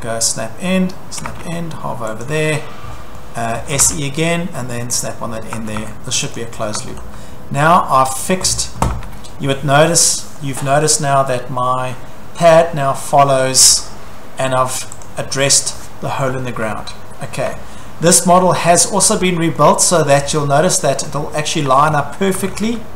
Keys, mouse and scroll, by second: 1.2-1.6 typing, 2.3 click, 2.6-3.8 scroll, 3.5-4.3 typing, 5.0 click, 5.3 scroll, 5.6 Escape, 5.8 Escape, 6.4 click, 6.6 scroll, 6.8 Escape, 7.0 Escape, 8.2 click, 8.9 Escape, 9.4 scroll, 12.5-12.9 scroll, 13.3-14.1 scroll, 15.0 click, 15.7 scroll, 16.4 scroll, 17.4 shift+middle click, 17.6 shift+scroll, 18.8 click, 19.1-19.8 scroll, 20.1-21.6 shift+middle click, 20.6 middle click, 20.9 middle click, 21.0 middle click, 21.2 scroll, 21.7 shift+middle click, 22.2 Escape, 22.4 Escape, 22.4 middle click, 22.6 middle click, 22.8 middle click.